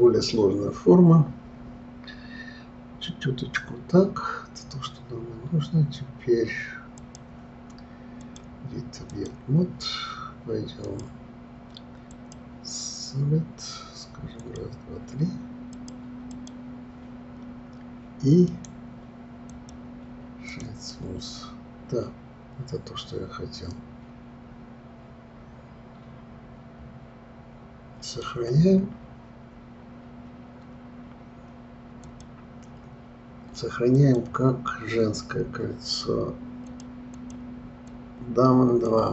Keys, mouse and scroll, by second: 0.3-3.4 scroll up 1, 7.0 click, 8.2-13.9 drag, 14.4 click, 15.7 click, 18.5-20.5 right drag, 20.5 click, 20.9-23.9 middle drag, 32.0-35.0 drag.